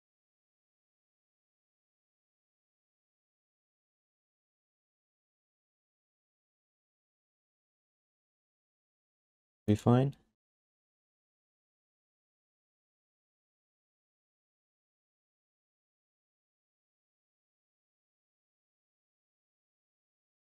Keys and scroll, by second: 0.0-1.3 typing, 7.4 q, 8.1 alt+shift+d, 8.4 ctrl+s, 12.0 g, 12.8 alt+shift+d, 13.0 ctrl+s, 18.2 1.